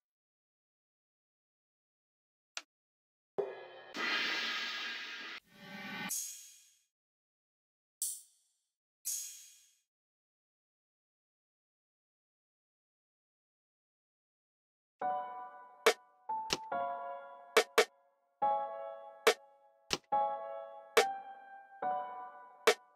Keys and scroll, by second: 0.1-1.8 typing, 10.5 f, 11.4 x, 13.0 x, 18.3 alt+super+s, 19.3 x, 19.8 x, 22.5 x.